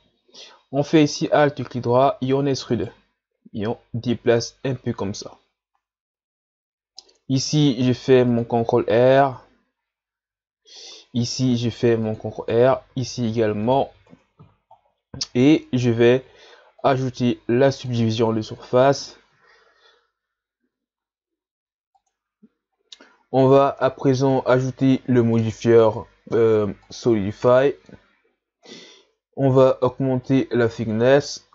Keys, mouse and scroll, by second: 0.9 alt+right click, 2.3 e, 3.6-6.6 drag, 7.8 ctrl+r, 11.4 ctrl+r, 12.9 ctrl+r, 14.1 Tab, 16.8-19.8 drag, 23.8-25.4 middle drag, 25.4-27.5 drag, 27.5-29.6 middle drag, 29.6-30.3 scroll down 2, 30.3-31.5 drag.